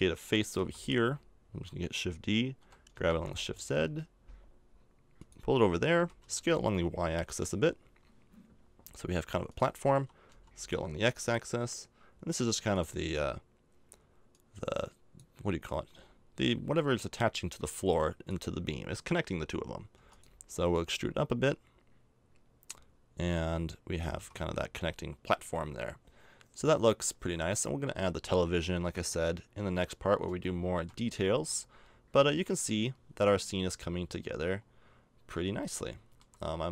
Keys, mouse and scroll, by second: 0.5 shift+d, 2.5 g, 5.9 s, 9.9 s, 14.3 click, 17.3 click, 19.9 e, 20.7-22.5 drag, 24.1 a, 24.1 Tab, 24.8-27.2 middle drag, 29.7-34.5 middle drag, 31.3 a, 35.6-36.7 middle drag.